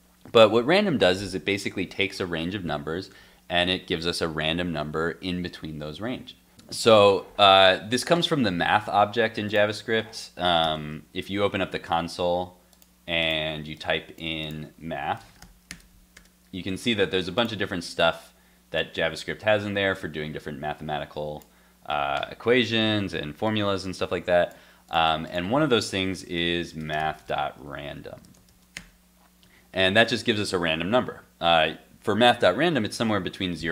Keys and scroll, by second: 10.6 alt+super+j.